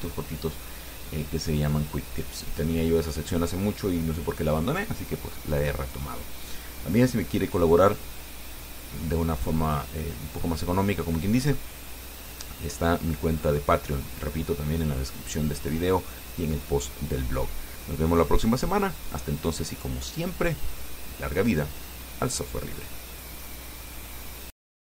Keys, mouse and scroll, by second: 24.0 click.